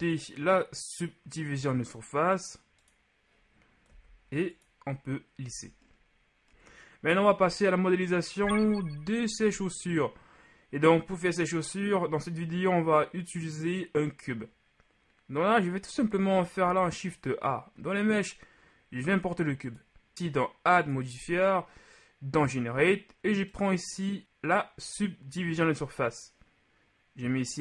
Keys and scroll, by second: 4.0 w, 5.5 a, 6.5 a, 16.7 shift+a.